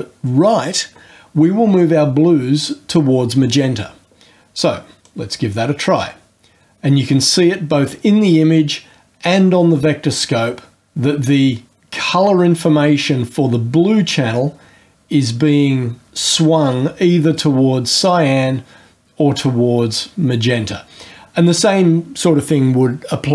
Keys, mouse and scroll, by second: 5.0-21.7 drag, 21.7-23.3 scroll up 2.